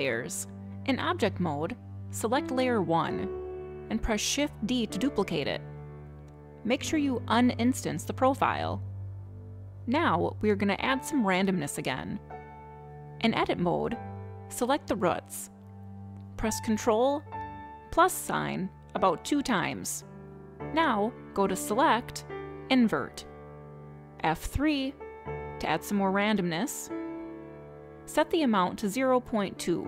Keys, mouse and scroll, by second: 3.7 click, 5.5 shift+d, 7.2 click, 9.3 click, 14.8 click, 16.2 click, 18.4 ctrl+KP_Add, 18.9 ctrl+KP_Add, 21.6 click, 25.1 F3, 28.6 click.